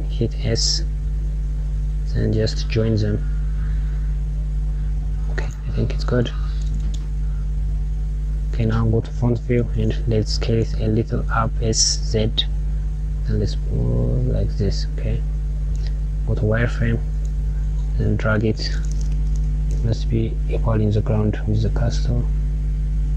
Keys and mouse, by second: 8.2 KP_1.